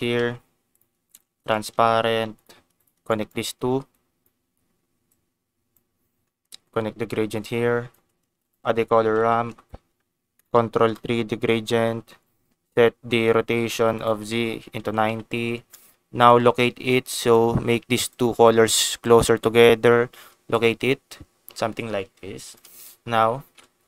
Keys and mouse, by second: 1.3 shift+a, 3.1 ctrl+shift+click, 4.9 click, 5.0 click, 6.8-8.0 drag, 8.3 shift+a, 9.2 o, 10.9 click, 11.5 ctrl+t, 12.0 click, 13.9-16.0 drag, 16.9 click, 18.0 click, 19.0 click, 20.5-22.6 shift+drag, 23.4 ctrl+s.